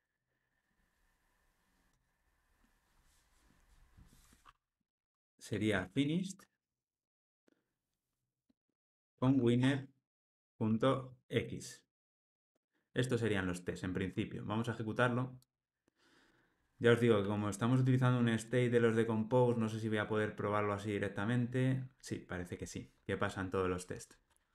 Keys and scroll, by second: 7.3 Return, 11.9 alt+super+l, 12.3 ctrl+alt+o.